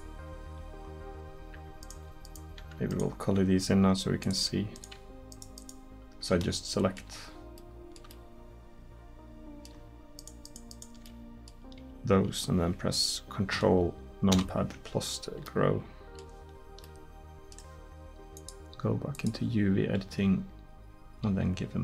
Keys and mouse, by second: 2.6 Tab, 10.2 middle click, 14.4 ctrl+KP_Add, 21.3 g.